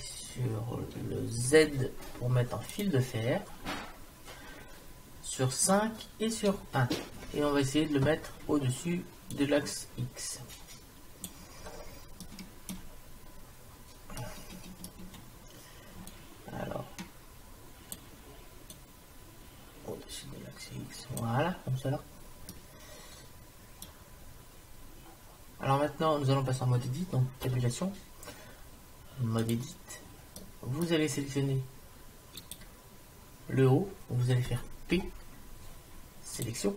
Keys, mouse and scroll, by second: 1.6 z, 5.7 KP_5, 6.5 KP_1, 9.4-11.1 drag, 11.6-15.8 middle drag, 11.6-12.3 scroll up 1, 16.1-17.9 drag, 18.7-20.6 drag, 22.1-26.1 middle drag, 27.5 Tab, 30.4 middle click, 32.5-34.0 right drag, 34.9 p.